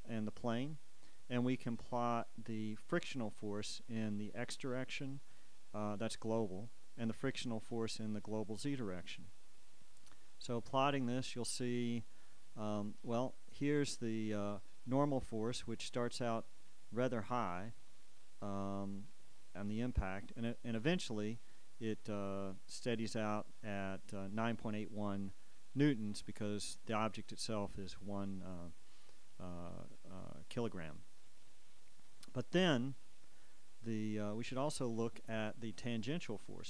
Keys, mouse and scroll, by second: 3.1 click, 7.0 click, 10.8 click, 15.8 click, 19.2-21.2 drag, 34.4 click.